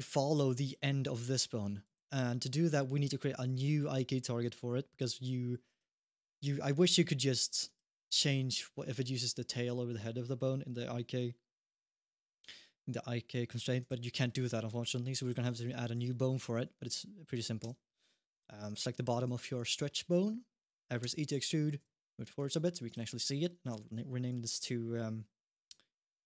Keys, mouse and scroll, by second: 0.1 g, 1.8 alt+g, 3.3 click, 4.8-5.2 scroll up 1, 5.4 click, 7.4 click, 13.6 click, 15.0 click, 17.4 Tab, 18.1 click, 19.7 middle click, 20.8 e, 21.4 g, 22.6 click, 23.1 F2.